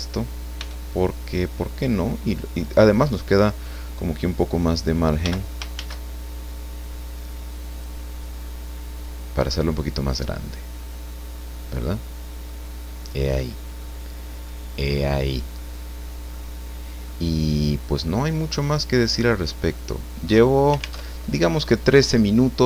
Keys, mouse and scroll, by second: 0.6 s, 2.9 click, 5.2 g, 5.7 shift+z, 7.7 click, 8.3 middle click, 9.2 scroll down 2, 9.6-12.6 middle drag, 12.7-13.0 scroll down 2, 13.1 middle click, 14.1 scroll down 2, 14.4 middle click, 15.0 click, 15.7-16.1 scroll up 1, 16.3-18.1 middle drag, 18.9 click, 19.6 click, 21.1 alt+Tab, 22.1-22.4 scroll down 2.